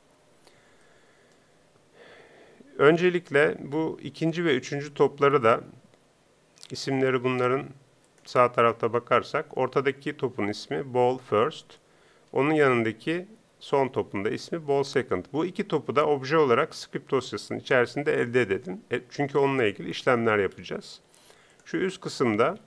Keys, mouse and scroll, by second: 17.8-22.6 drag.